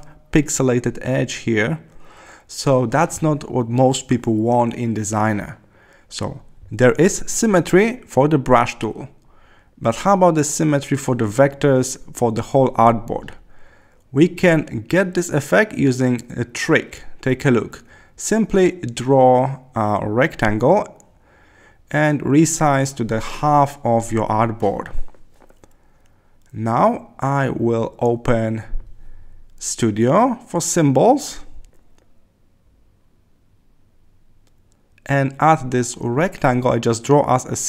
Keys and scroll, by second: 0.6 super+0, 5.4 Left.